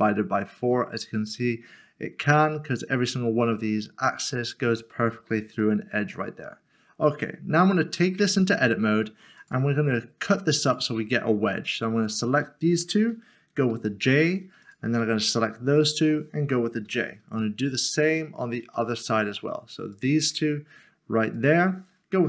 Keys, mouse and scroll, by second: 5.6 middle click, 8.2 Tab, 9.4 click, 11.0 s, 12.0 shift+click, 13.7 j, 15.0 s, 16.0 shift+click, 16.9 j, 17.5 middle click, 18.7 shift+middle click, 21.4 shift+click.